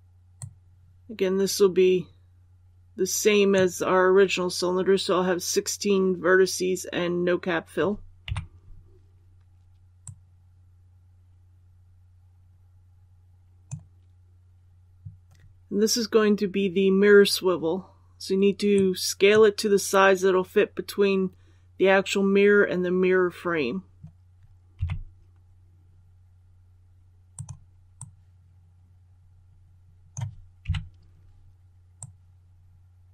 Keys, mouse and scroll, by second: 8.1 KP_1, 9.9-20.1 drag, 24.6 s, 27.2-30.0 drag, 30.5 KP_3, 31.9-33.1 drag.